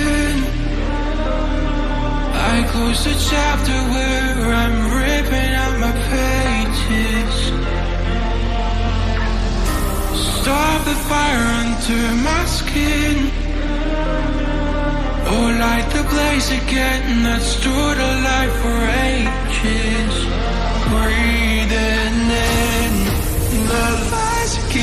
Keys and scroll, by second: 19.1 ctrl+e.